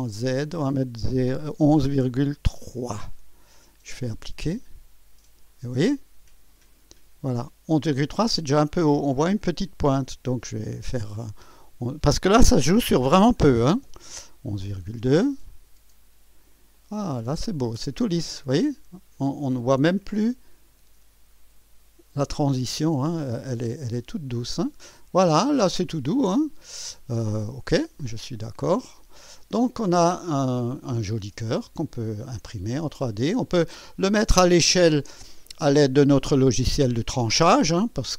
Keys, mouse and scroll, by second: 0.0 click, 1.7 BackSpace, 2.6 BackSpace, 4.4 click, 5.8-8.8 drag, 11.1 click, 12.8 BackSpace, 13.8 2, 15.4 click, 16.7-19.5 drag, 20.2-21.8 drag, 22.9-24.6 drag, 24.9-26.4 drag, 28.0 click, 29.0-30.4 drag, 30.5-30.9 scroll down 1, 31.5-33.9 drag.